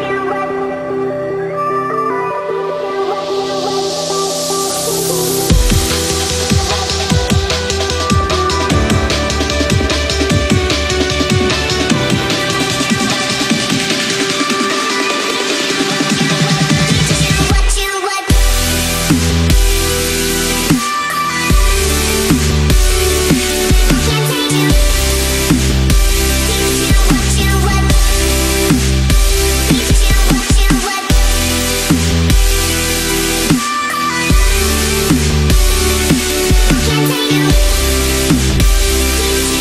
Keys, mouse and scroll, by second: 6.6 Up, 7.7 click, 8.1 right click, 8.9 click, 8.9 click, 11.3 ctrl+a, 13.6-14.8 drag, 16.9 Up, 19.2 click, 19.9 space, 20.0 click, 20.2 space, 20.8 click, 21.9 shift+click, 23.0-24.6 drag, 24.8 Up, 26.0 ctrl+z, 27.4-28.3 shift+drag, 29.1 click, 30.6 shift+click, 31.8-33.7 alt+drag, 33.7 Down, 34.3 Right, 35.1 Up, 35.5 Right, 37.1 Left, 37.3 click, 37.6-38.1 space.